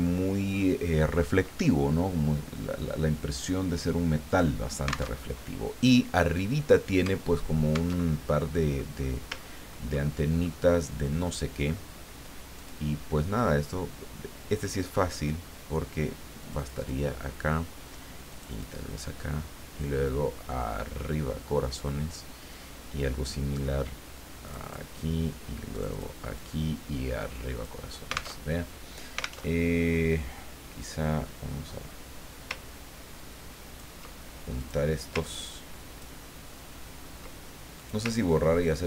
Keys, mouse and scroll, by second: 4.3 click, 5.1 alt+Tab, 7.9 alt+Tab, 8.7 scroll up 2, 8.9-9.4 scroll down 3, 9.4 ctrl+scroll up 2, 9.6-10.1 ctrl+scroll down 2, 10.1 ctrl+click, 11.2 click, 12.5-13.6 drag, 16.4 click, 18.3 click, 19.8-22.3 drag, 24.4 click, 25.7 click, 26.4-28.0 drag, 28.4 alt+Tab, 29.4 alt+Tab, 30.8-34.1 drag, 34.6 click, 35.2-36.2 ctrl+drag, 37.8-38.8 ctrl+drag.